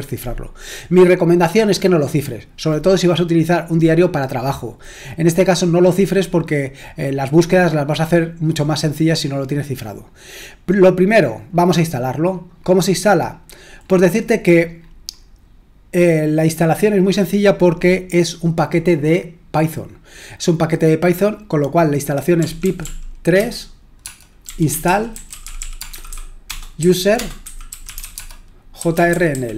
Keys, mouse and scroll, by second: 10.4-12.3 scroll down 1, 12.3-17.4 scroll down 2, 17.4-18.5 scroll down 1, 18.5-22.4 scroll down 1, 22.1-29.3 typing.